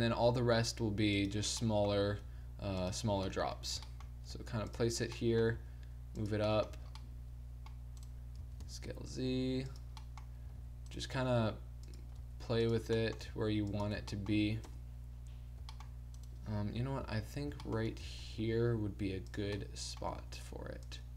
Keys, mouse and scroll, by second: 1.5 middle click, 2.3 s, 4.3 g, 5.5 g, 6.7 a, 7.3-8.6 middle drag, 8.4 s, 9.7 click, 10.0 middle click, 10.5 g, 11.1 r, 12.2 g, 13.2 g, 14.0 a, 14.2 middle click, 14.6 KP_0, 16.8 KP_7, 17.1 z, 18.0 z, 18.4 g, 19.3 click, 20.1 g.